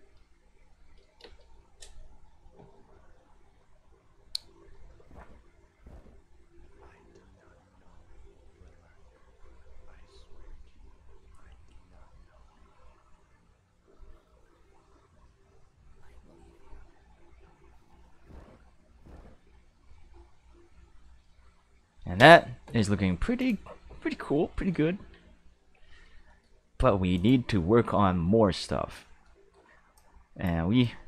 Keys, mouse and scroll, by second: 1.2 space, 22.2 space, 23.4 click, 25.6 q, 26.3 shift+middle click, 27.1 click, 28.1 middle click, 29.2 middle click, 29.9-30.4 drag, 30.8-31.0 drag.